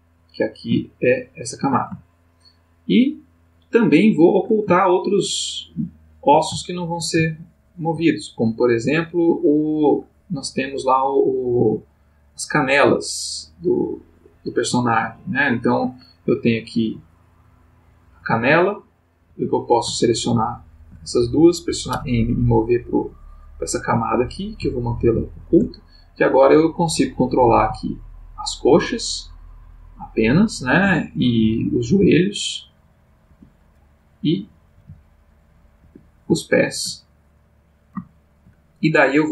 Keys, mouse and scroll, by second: 0.1 click, 1.1 shift+click, 2.0-4.5 shift+middle drag, 5.6-6.4 ctrl+middle drag, 6.6-7.2 ctrl+shift+middle drag, 7.3-8.1 ctrl+shift+middle drag, 8.6 click, 13.5 click, 15.3 shift+click, 16.6 click, 17.5 click, 18.2 g, 19.3 Escape, 20.2 shift+click, 21.9 m, 22.6 click, 24.8 shift+click, 26.6 click, 27.5 g, 30.8 Escape, 31.8 click, 32.0 g, 33.3 Escape, 34.0 click, 34.8 g, 35.8 Escape, 36.4-37.0 shift+middle drag, 37.4 click, 38.1-38.6 shift+middle drag, 39.0 click.